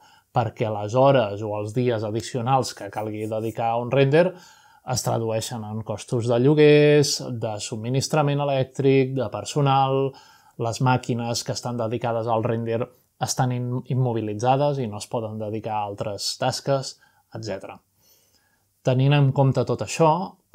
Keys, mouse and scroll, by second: 1.8 shift+click, 2.6 middle click, 5.3-6.6 drag, 7.2 g, 9.1 click, 11.1-13.3 drag, 13.5 click, 14.8 middle click, 16.0 middle click, 16.2 g, 16.8 click, 17.9 middle click, 18.7-20.1 middle drag, 19.2-20.4 scroll down 1, 20.4 middle click.